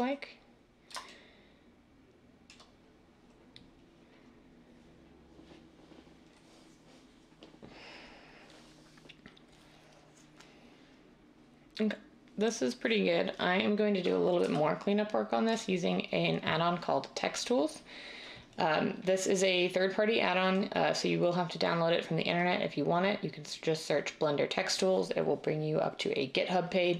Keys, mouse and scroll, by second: 14.4 n.